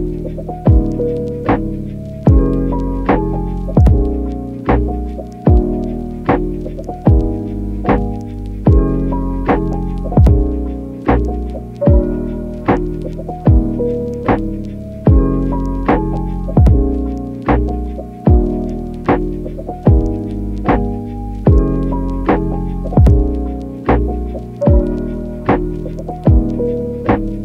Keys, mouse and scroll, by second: 0.0-11.0 typing, 3.6 click, 5.1 click, 8.0 click, 8.9 click, 12.0-25.0 typing, 13.6 ctrl+z, 15.7 click, 16.1 click, 16.4 click, 17.9 click, 18.5 click, 19.4 click, 22.0 click, 23.1 click, 24.2 click, 26.7-27.4 typing.